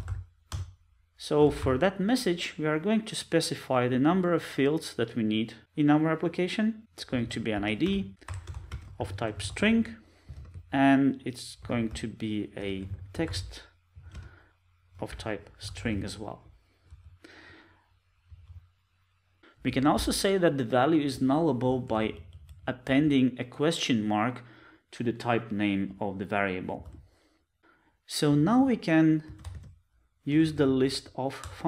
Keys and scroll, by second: 31.5 Return.